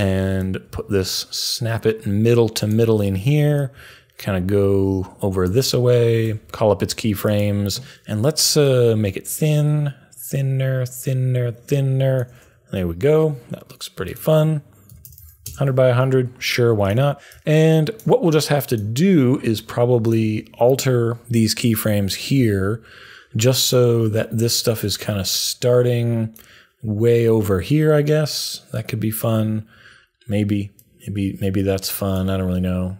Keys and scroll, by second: 6.2 u, 14.6-15.6 typing, 22.3 u.